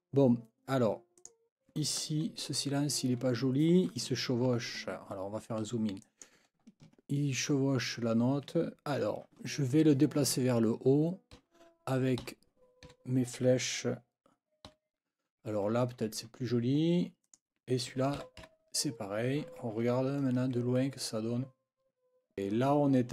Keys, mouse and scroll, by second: 1.2 click, 5.2 ctrl+scroll up 2, 6.0 ctrl+click, 6.4-6.7 ctrl+scroll up 2, 11.3 Up, 12.2 Up, 12.9 Down, 14.7 Up, 17.2 click, 18.2 Up, 19.9-20.4 ctrl+scroll down 4.